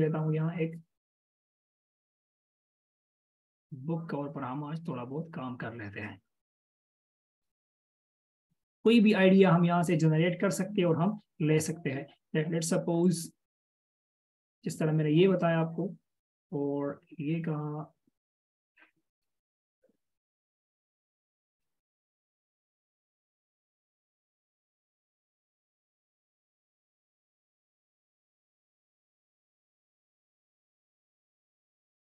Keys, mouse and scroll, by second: 26.4 right click, 31.3 ctrl+v.